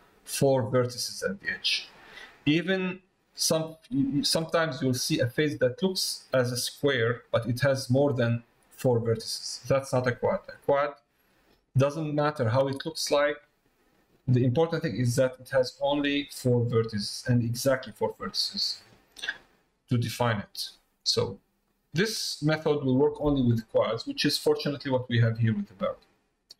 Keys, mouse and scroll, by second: 4.9 middle click, 12.3 middle click, 19.6 middle click, 21.2 middle click, 23.9 middle click, 24.9 middle click, 25.6 middle click, 26.4 middle click.